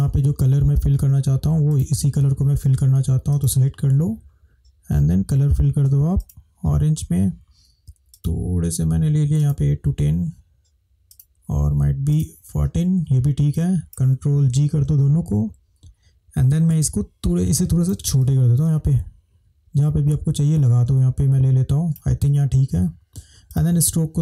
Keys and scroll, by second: 14.8 ctrl+g.